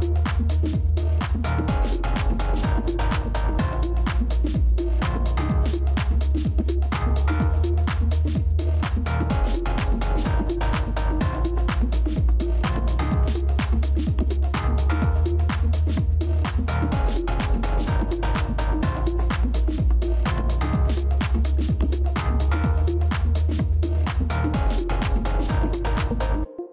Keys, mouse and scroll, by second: 6.7 double click, 16.1 double click.